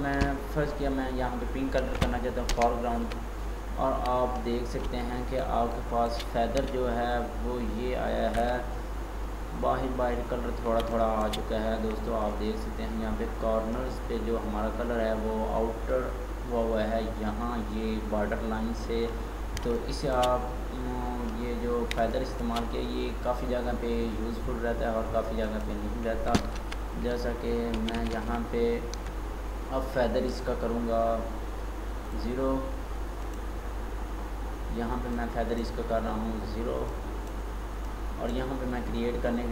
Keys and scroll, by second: 2.4 alt+BackSpace, 26.5 ctrl+d, 27.9 ctrl+z.